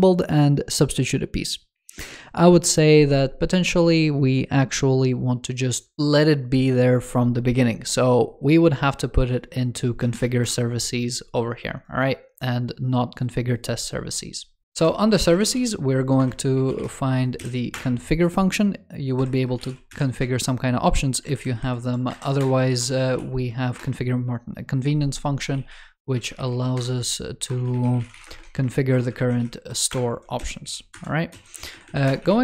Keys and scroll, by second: 21.1 alt+Left, 22.0 shift+super+Right.